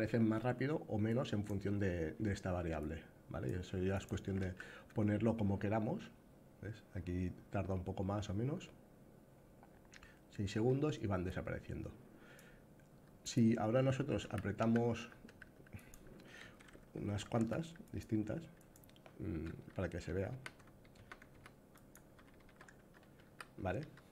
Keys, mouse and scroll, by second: 0.8 click, 2.5 click, 3.7 click, 3.8 s, 4.1 d, 10.9-12.1 drag, 12.9 click, 13.5 a, 13.9 s, 16.1 z, 18.3 click, 19.3-23.8 typing, 21.4 click.